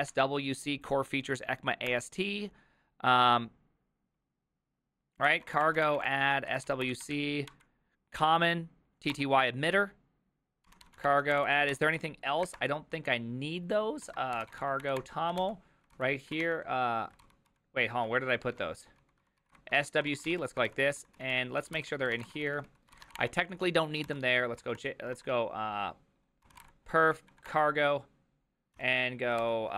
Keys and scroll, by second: 0.0-0.4 typing, 1.6-2.4 typing, 5.9-7.1 typing, 7.5 Up, 9.1 Return, 10.4-12.6 typing, 14.1 ctrl+p, 14.1-15.4 typing, 15.9 ctrl+c, 16.4 shift+;, 17.2 ctrl+c, 17.5 ctrl+u, 18.1-25.1 typing, 24.1 Return, 24.1 ctrl+p, 26.2-27.1 typing, 27.1 Up, 27.3 Down, 27.5 Return, 28.8 o, 29.4 ctrl+c.